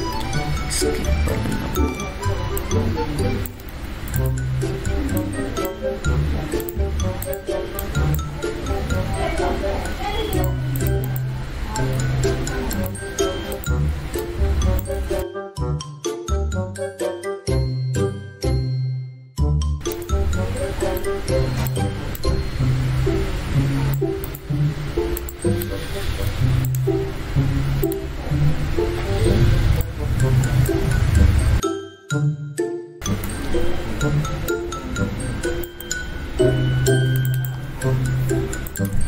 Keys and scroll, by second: 0.1 ctrl+z, 4.7 ctrl+z, 12.7 ctrl+z, 15.4 ctrl+z, 33.3 ctrl+t, 34.1 ctrl+shift+t.